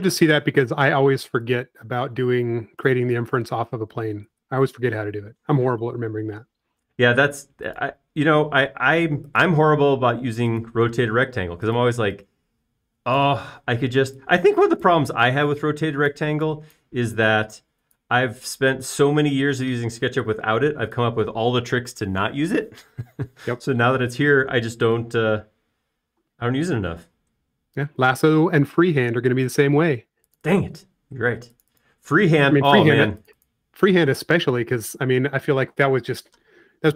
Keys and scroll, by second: 2.1 p, 5.3 Escape, 6.6 space, 7.2 l, 11.0 l, 12.9 typing, 14.5 typing, 16.0 typing.